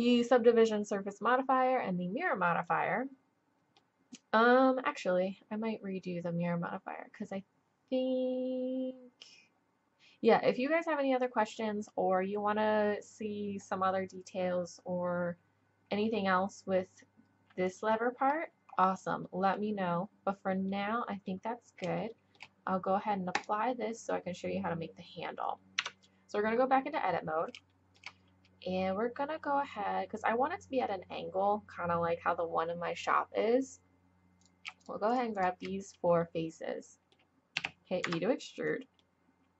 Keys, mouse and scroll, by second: 2.7-5.9 drag, 6.5-9.9 drag, 18.3-18.7 middle drag, 18.7-25.2 drag, 25.8 Tab, 27.7-29.9 drag, 34.4-37.6 drag, 37.6 e.